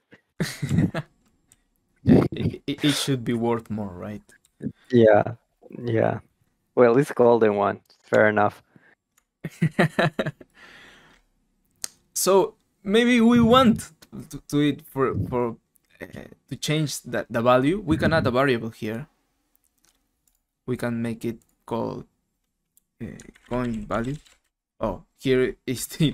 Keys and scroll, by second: 0.6-2.0 typing, 4.4-5.2 typing, 8.1 alt+Tab, 23.0-24.9 typing, 25.9 shift+Home.